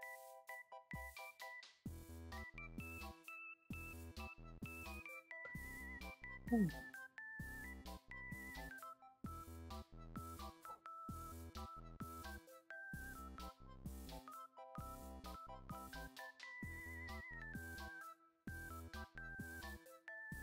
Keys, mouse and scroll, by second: 0.3 alt+right drag, 0.8 alt+click, 1.0 Tab, 1.5 alt+click, 2.0 alt+click, 3.1 alt+click, 3.9 Tab, 4.3 alt+click, 4.6 alt+middle click, 4.9 alt+right drag, 5.4 click, 5.8 q, 6.2 alt+middle click, 7.0 ctrl+s, 7.6 alt+middle click, 8.4 alt+right click, 9.2 alt+click, 10.3-12.5 drag, 13.4 alt+click, 13.8 alt+right click, 14.6 alt+middle click, 16.0 alt+click, 16.4 alt+click, 17.4 alt+click, 18.1 alt+middle click, 20.2 alt+right click.